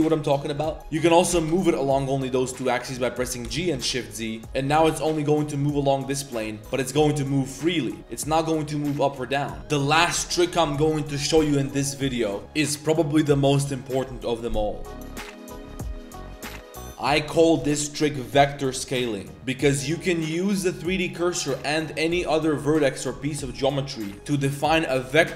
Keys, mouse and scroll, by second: 0.8 ctrl+z, 0.9 click, 1.1 g, 3.4 g, 4.4 click, 4.4 z, 4.7 g, 6.6 shift+g, 8.3 g, 9.6 Tab, 16.9 a, 19.3 click, 20.1-20.6 drag.